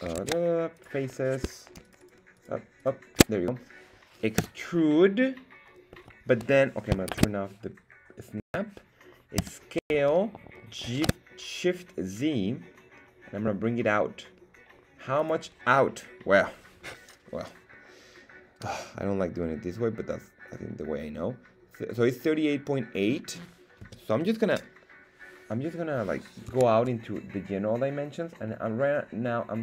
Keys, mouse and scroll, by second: 0.1 ctrl+Tab, 1.1 right click, 2.4 alt+shift+right click, 5.2 e, 7.8 Escape, 7.8 shift+Tab, 10.3 shift+s, 11.7 shift+z, 15.2 click, 26.6 Tab.